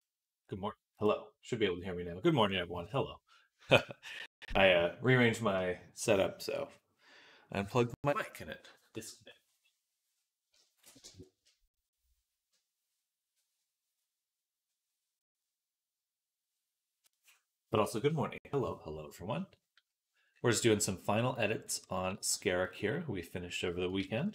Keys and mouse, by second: 22.0 g, 23.9 ctrl+s, 24.2 KP_3.